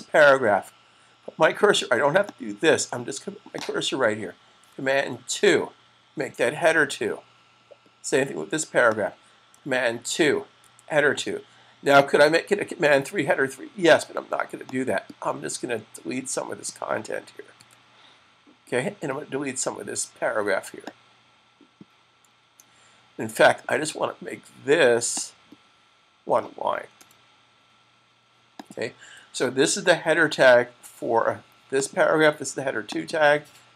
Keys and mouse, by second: 4.5 super+click, 5.2 super+2, 8.7 click, 10.4 super+2, 14.5 click, 20.7 click, 24.9 click, 26.7 click, 28.5 click, 29.3 super+s, 31.7 click.